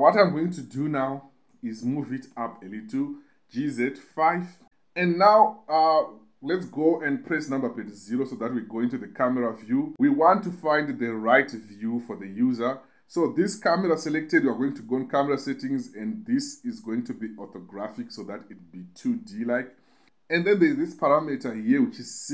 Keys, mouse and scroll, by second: 0.0-1.9 typing, 3.4 5, 4.3 click, 7.2 KP_0, 15.2-16.9 drag, 21.5-22.3 drag.